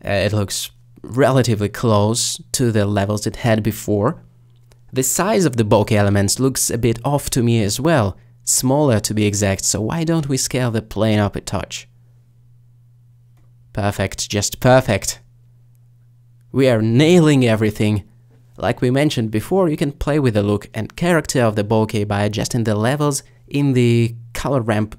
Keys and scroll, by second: 3.0 s.